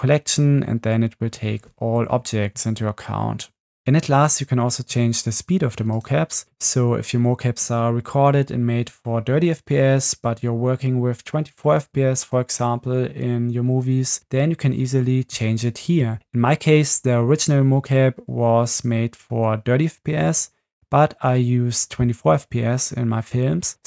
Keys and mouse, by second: 6.0-7.1 drag.